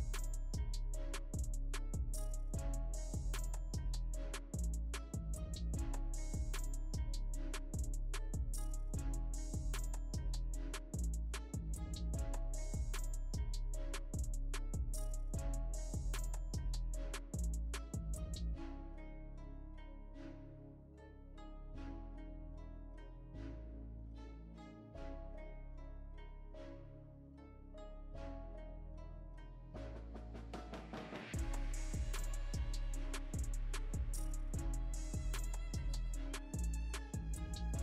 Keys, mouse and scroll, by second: 1.5-6.7 right drag, 6.7-19.5 drag, 19.5-24.5 right drag, 24.5 shift+click, 25.8-29.8 shift+drag, 29.8-31.6 right drag, 31.6 click, 35.4-37.8 drag.